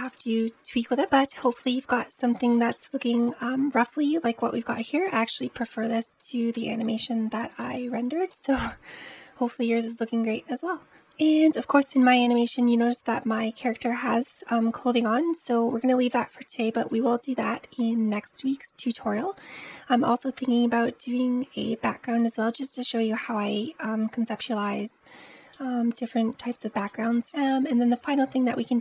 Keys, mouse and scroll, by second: 0.9 scroll up 2, 1.0-4.5 middle drag, 4.5-4.9 scroll up 1, 4.9-10.3 middle drag, 10.8 click, 12.0-14.5 scroll up 1, 23.0-27.5 middle drag.